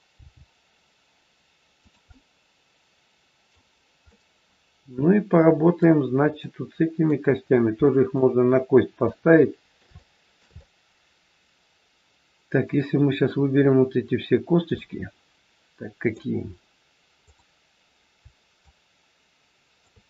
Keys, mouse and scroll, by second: 0.2 g, 1.9 middle click, 4.0 middle click, 7.4 middle click, 7.4 scroll up 1, 7.8 shift+middle click, 8.0 shift+middle click, 8.9 middle click, 9.9 shift+middle click, 10.4 middle click, 14.7 middle click, 17.2 click, 18.6 shift+click.